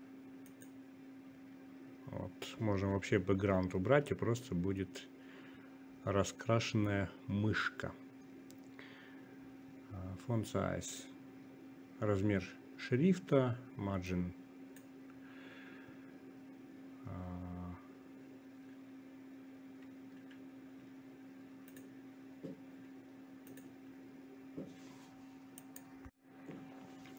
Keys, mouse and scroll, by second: 1.9-4.2 drag, 17.7-27.1 drag.